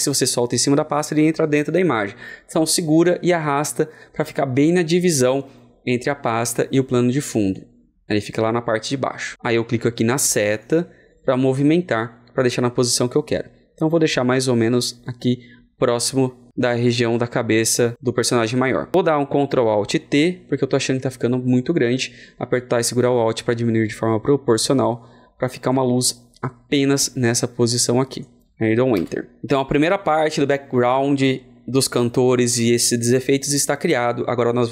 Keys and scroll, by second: 19.9 ctrl+alt+t, 22.4 ctrl+alt+t.